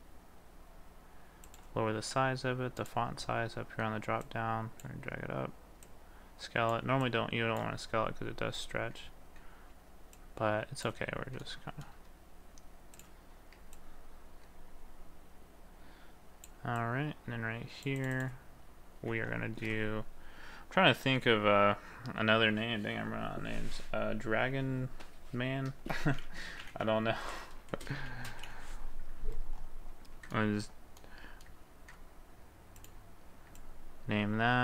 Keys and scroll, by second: 19.1 ctrl+a, 26.2 shift+d, 27.8 space, 28.1 m.